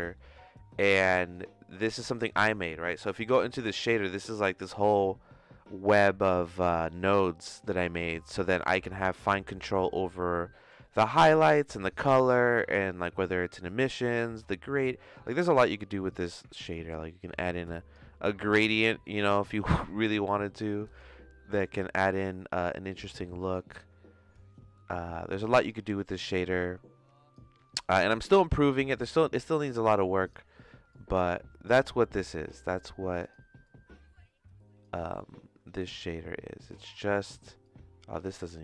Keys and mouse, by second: 0.1 middle click, 1.9 click, 3.0 click, 3.2 Tab, 4.4 middle click, 9.0 Tab, 11.0 middle click, 14.4 middle click, 17.2 click, 18.7 shift+middle click, 19.1 middle click, 20.0 click, 21.6 shift+middle click, 25.6 click, 28.5-30.3 drag, 30.9-32.7 drag, 33.2 click, 35.8 shift+middle click, 37.6-38.6 drag.